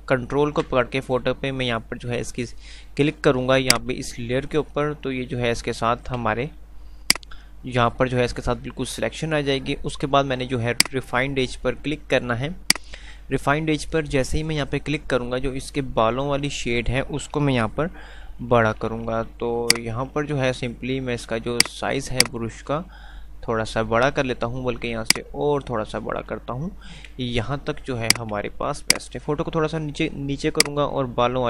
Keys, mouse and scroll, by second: 4.1 shift+click, 7.4 shift+click, 10.9 shift+click, 19.6-23.4 shift+drag.